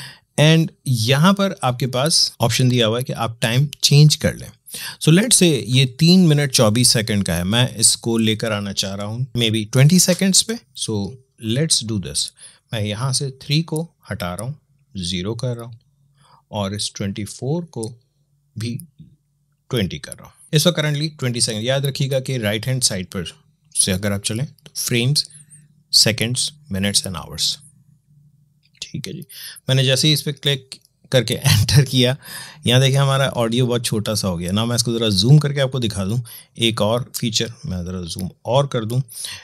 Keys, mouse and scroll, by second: 33.2 alt+Num_Lock, 34.2 scroll up 2.